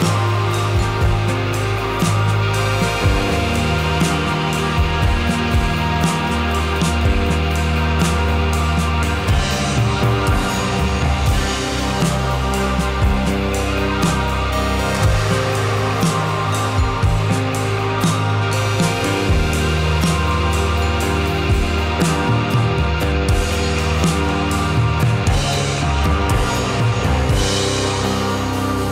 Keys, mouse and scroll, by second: 0.8 click, 1.1 r, 1.9 drag, 2.0-3.7 middle drag, 3.7 drag, 3.9 r, 4.3 drag, 4.5-7.2 middle drag, 7.2 click, 7.3 r, 8.2 drag, 8.4-12.1 middle drag, 12.1 drag, 12.3 r, 13.1-13.7 middle drag, 13.7 click, 14.1 drag, 14.5 `, 15.2 `, 15.8 `, 17.3 drag, 17.4-19.1 middle drag, 19.1 click, 22.5 r, 24.7 drag, 24.9-25.8 middle drag, 26.2-27.8 middle drag, 27.8 click, 28.0-28.7 middle drag, 28.7 r.